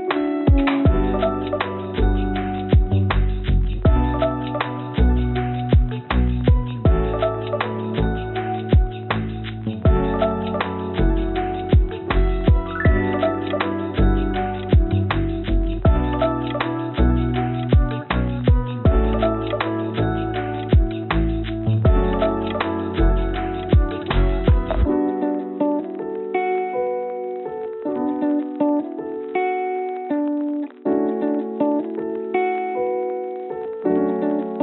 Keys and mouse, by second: 2.6 click, 4.6 click, 4.7-6.1 drag, 8.1 click, 10.4 shift+click, 11.4 shift+click, 13.4 shift+click, 15.1 shift+click, 16.9 shift+click, 18.4 shift+click, 19.5-24.5 right drag, 27.7 g, 29.0 click, 32.3 click, 32.8 click.